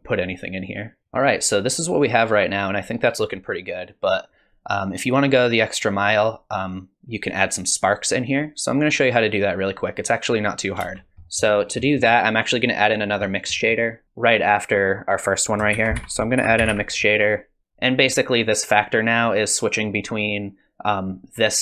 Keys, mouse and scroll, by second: 1.0 scroll down 1, 1.0 space, 10.8 space, 11.1 middle click, 11.1 click, 11.2 middle click, 11.6-13.0 scroll up 4, 11.8 middle click, 13.2 scroll down 2, 13.5 middle click, 14.8 click, 14.8 g, 15.3 click, 15.7 shift+a, 18.4 click.